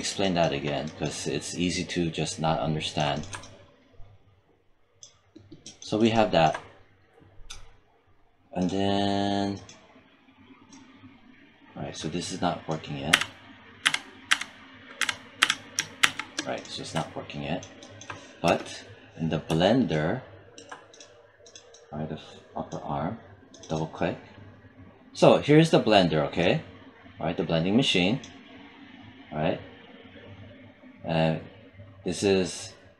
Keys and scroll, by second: 12.9 z, 15.9 shift+z, 18.3 space.